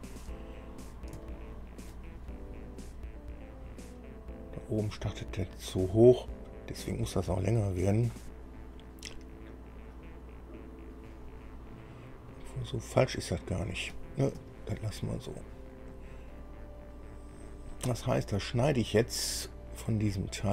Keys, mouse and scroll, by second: 1.1 scroll down 2, 1.4 shift+middle click, 3.1-3.7 scroll up 4, 4.5-4.9 scroll down 2, 7.6 click, 12.0 scroll up 1, 14.1 scroll down 1, 14.7 shift+middle click, 17.5 scroll down 1, 18.1-20.5 middle drag.